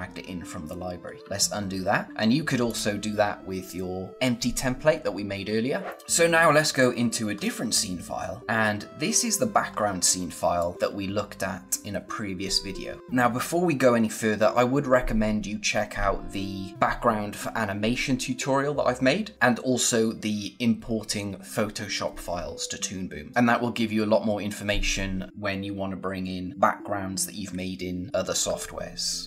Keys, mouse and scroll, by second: 1.2 ctrl+z, 2.6 click, 6.0 click, 6.4 scroll down 1, 7.3 scroll up 1, 9.6 scroll down 1, 10.2 scroll down 1, 10.5 click, 10.7 space, 13.5-13.9 scroll up 1.